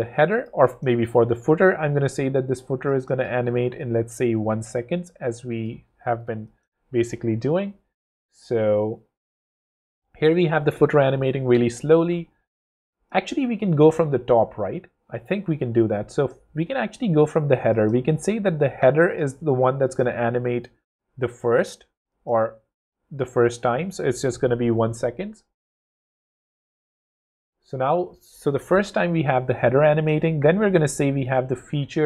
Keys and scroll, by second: 6.4 w, 13.3 super+z, 13.8 shift+super+z, 24.3 w.